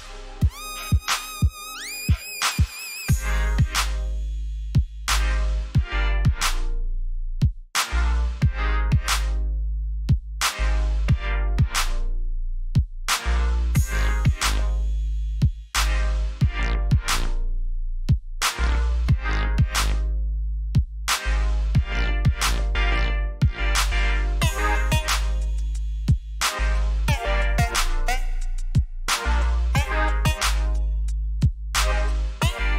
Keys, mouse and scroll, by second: 1.6-2.8 typing, 3.6 click, 12.7 ctrl+c, 13.7 click, 15.8 ctrl+shift+s, 17.5 click, 25.0 BackSpace, 25.6 ctrl+v, 27.2 click.